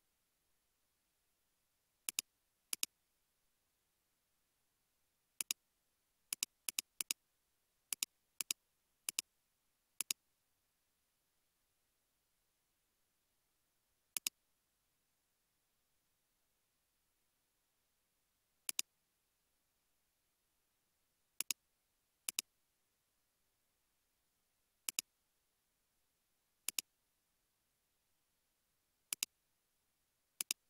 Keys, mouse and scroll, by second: 6.8 double click, 7.5 scroll down 1, 8.5 double click, 17.4 typing, 19.4-20.3 typing, 23.4 scroll up 1, 24.2-25.0 typing, 28.0-29.0 scroll up 1, 29.0 typing.